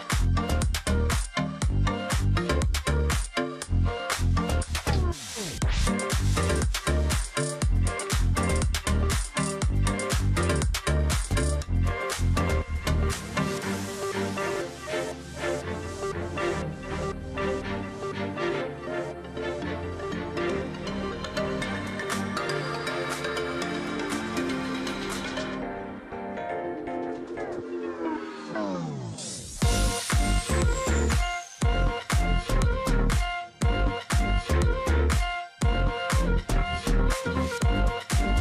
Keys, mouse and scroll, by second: 2.1 alt+click, 4.0-4.6 alt+scroll down 1, 4.6 ctrl+d, 6.7 double click, 6.9-7.5 alt+scroll down 1, 7.5-7.9 alt+scroll up 1, 8.6-9.1 alt+scroll up 1, 9.7 shift+click, 10.3 shift+click, 11.2 shift+click, 11.8 shift+click, 12.3 shift+click, 13.3 ctrl+g, 13.7 alt+scroll down 1, 13.8 space, 14.6 alt+click, 17.5 space, 17.9-18.4 alt+scroll up 1, 19.2-19.7 alt+scroll up 1, 19.9-20.4 alt+scroll up 1, 22.5 shift+click, 23.8 alt+click, 24.1 alt+scroll down 1, 24.2 space, 24.6 alt+click, 25.4 alt+scroll down 1, 25.9 ctrl+click, 27.3 alt+scroll down 1, 28.5 alt+scroll up 1, 28.6-29.1 alt+scroll down 1, 29.4 alt+scroll up 1, 29.6 alt+scroll down 1, 29.7 space, 30.3 ctrl+click, 30.7-31.6 alt+scroll up 2, 30.8 alt+space, 32.2 double click, 34.2-34.6 alt+scroll up 1, 34.7 space, 35.1 ctrl+z, 36.0 ctrl+z, 37.1 ctrl+z, 38.0 double click, 38.2 space.